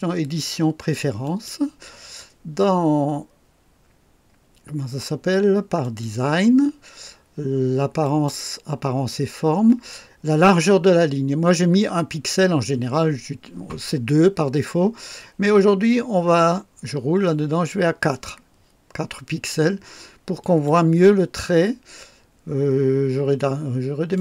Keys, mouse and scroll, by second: 1.2 click, 5.8 click, 8.0 click, 16.6-16.9 scroll up 1, 17.5 scroll up 2, 20.4 click, 24.1 click.